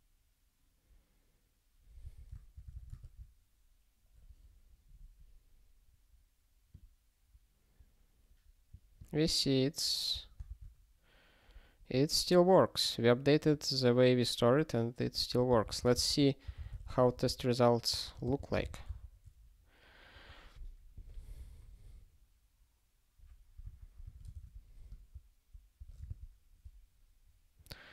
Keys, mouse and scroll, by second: 2.0 super+o, 10.2 click, 10.4 alt+shift+., 11.6 scroll up 1, 13.4 click, 15.0 click, 15.5 ctrl+b, 15.8 alt+d, 16.0 alt+d, 16.4 t, 18.3 Return, 18.6 ctrl+s, 23.6 super+o.